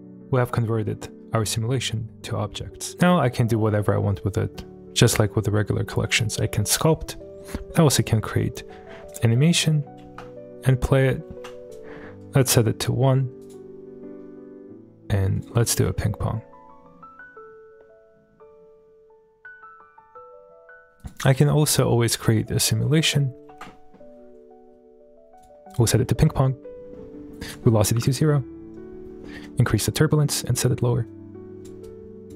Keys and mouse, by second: 0.1-1.2 middle drag, 9.1 click, 10.0 space, 11.3 space, 11.7 click, 13.4-15.5 drag, 15.7 space, 21.0 click, 21.0 h, 21.4 middle click, 22.9 space, 23.6 middle click, 23.6 space, 25.4-25.8 drag, 27.5 click, 29.4 click, 30.1 click, 31.1 click, 31.8-32.3 drag.